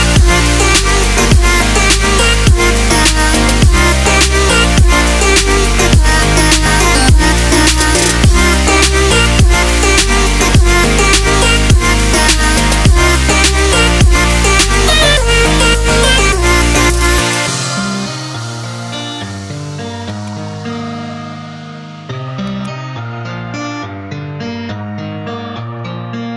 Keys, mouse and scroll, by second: 0.6 click, 1.7 right click, 2.6 x, 4.6 click, 11.9 ctrl+z, 15.0-16.9 drag, 16.9 3, 17.2 right click, 18.7 click, 20.1-22.5 drag, 23.9 ctrl+z, 24.4 ctrl+z, 24.9 ctrl+z, 25.5 ctrl+z.